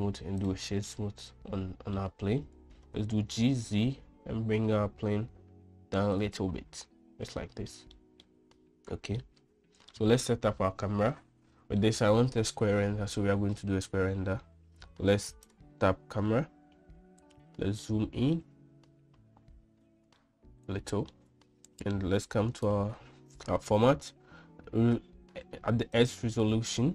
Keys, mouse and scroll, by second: 0.5 right click, 1.5-2.6 middle drag, 3.7 g, 7.9-8.3 middle drag, 8.6 middle click, 9.8 middle click, 11.8-12.4 middle drag, 16.1 click, 18.6 shift+middle click, 20.8 shift+middle click, 23.2 click, 26.6-26.9 drag.